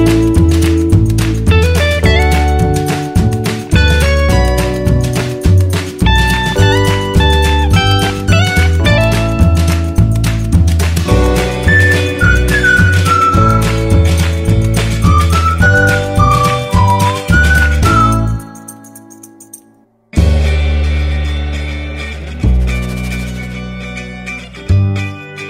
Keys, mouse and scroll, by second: 0.0-4.2 alt+drag, 4.2-14.0 alt+drag, 14.0 click, 17.4 Return, 19.1 click, 22.8 click, 23.9-25.4 drag.